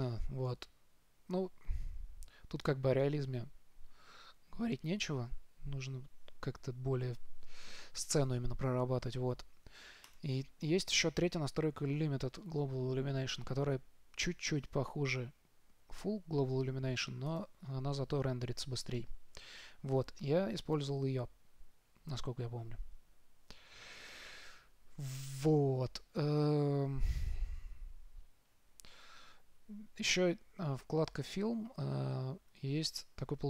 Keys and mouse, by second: 10.7-12.6 drag.